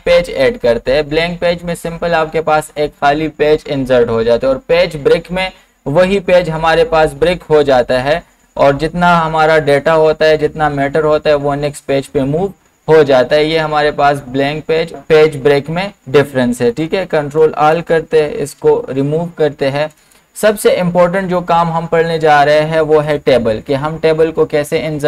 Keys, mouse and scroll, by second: 17.4 ctrl+a, 18.6 BackSpace, 19.9 click, 23.1 click.